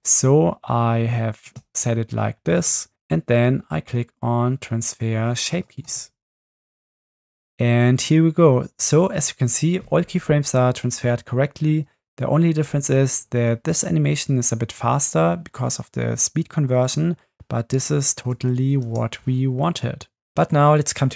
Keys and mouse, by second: 1.4-2.7 drag, 5.6 click, 7.5 Right, 7.5 space, 18.9 space.